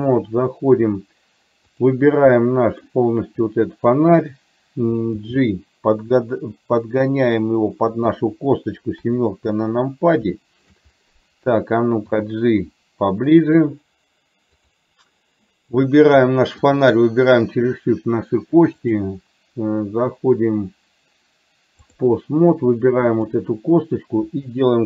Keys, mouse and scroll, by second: 2.5 middle click, 3.6 click, 5.4 g, 9.1 KP_7, 10.4 shift+middle click, 12.1 g, 14.9 click, 19.0-22.2 drag, 23.2 click.